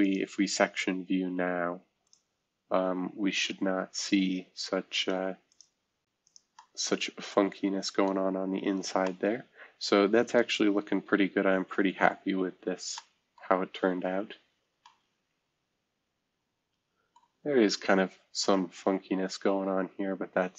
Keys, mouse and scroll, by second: 0.0-1.0 drag, 2.0-2.8 drag, 5.5 click, 5.6 middle click, 6.2 click, 6.3 middle click, 8.2-8.5 scroll down 2, 8.5-9.0 scroll up 2, 9.4 scroll up 1, 10.7-11.4 scroll up 1, 11.4-12.2 scroll down 1, 12.2-12.9 scroll up 2, 12.9-14.0 middle drag, 13.4-14.1 scroll down 2, 14.1-15.7 scroll up 2, 17.4-19.0 scroll up 2, 19.5-20.5 scroll down 3.